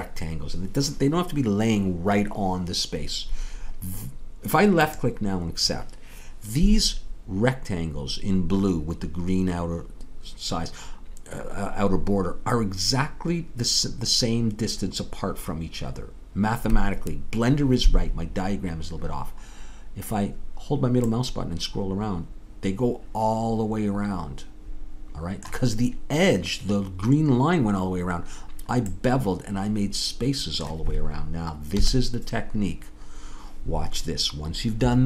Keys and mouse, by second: 21.2-23.7 middle drag, 29.3-31.9 middle drag, 31.9 KP_3.